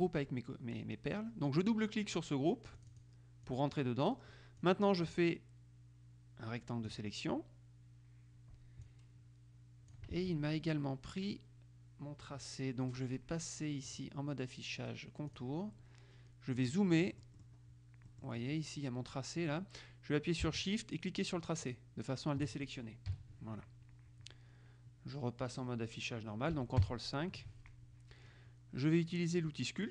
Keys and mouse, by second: 2.9 click, 4.7-7.5 drag, 9.0-10.5 drag, 10.3 ctrl+z, 14.1 click, 15.5 click, 16.7-18.1 middle drag, 18.2 middle click, 21.8 shift+click, 23.3 KP_5, 27.0 ctrl+KP_5.